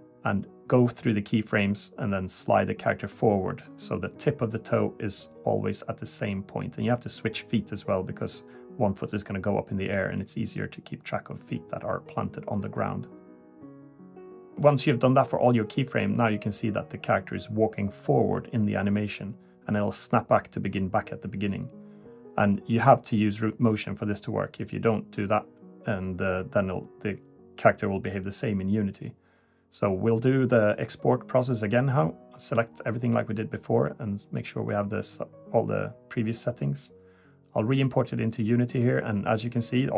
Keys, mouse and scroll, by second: 1.5 click, 2.9 click, 5.8 click, 7.2 click, 10.0 click, 12.0 click, 15.8 click, 18.1 click, 19.1-19.5 scroll down 3, 20.3 shift+middle click, 23.6 click, 27.7 click, 28.4 click, 29.1 a, 30.1 click, 32.8 click.